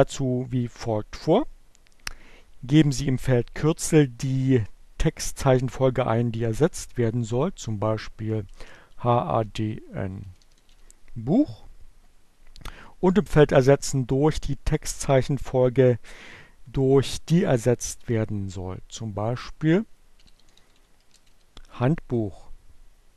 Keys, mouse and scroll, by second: 7.2-8.2 typing, 9.5-10.6 typing, 19.0 click, 19.5-21.2 typing.